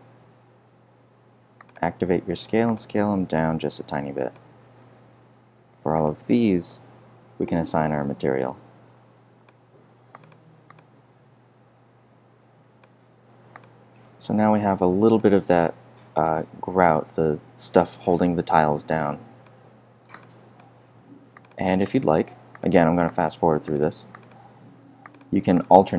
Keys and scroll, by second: 0.1 f.